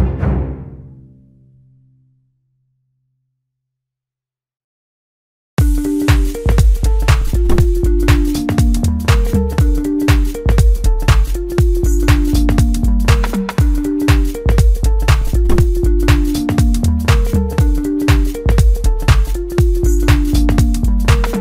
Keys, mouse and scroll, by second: 6.1 scroll down 2, 7.2-8.0 scroll up 1, 8.2-9.6 middle drag, 9.6 scroll up 3, 11.8 click, 13.1-16.0 drag, 17.1-18.9 drag.